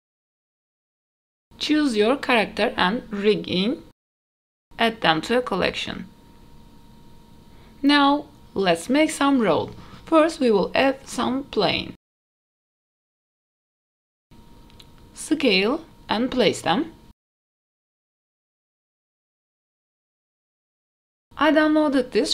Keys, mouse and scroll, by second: 0.1 ctrl+z, 0.4 scroll up 1, 0.4 KP_3, 0.4 r, 0.6 h, 0.8 ctrl+z, 2.6-3.3 drag, 5.1 m, 8.1 click, 9.4 h, 9.8-10.5 middle drag, 10.8 shift+middle click, 11.4 shift+middle drag, 11.9 shift+a, 12.6 scroll down 1, 12.7 middle click, 13.2 middle click, 13.4 alt+h, 13.6 click, 13.7 click, 13.8 middle click, 14.0 s, 15.2 g, 17.5 ctrl+z, 17.7 s, 18.2 g, 18.8 scroll down 1, 18.8 shift+middle click, 19.2 click, 19.4 click, 19.6 scroll up 2, 19.6 middle click, 19.7 s, 20.4 scroll down 1, 20.5 middle click, 21.2 ctrl+s.